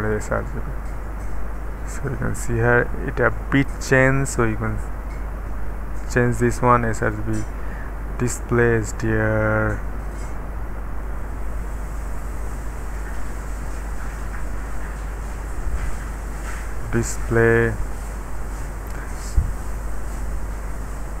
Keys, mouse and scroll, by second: 0.0 click, 2.2-2.9 scroll down 1, 2.9-4.4 middle drag, 3.9-5.1 scroll up 1, 4.7-7.0 middle drag, 7.0 click, 11.0 click, 12.9-13.6 scroll down 1, 13.4-16.5 middle drag, 16.8 click.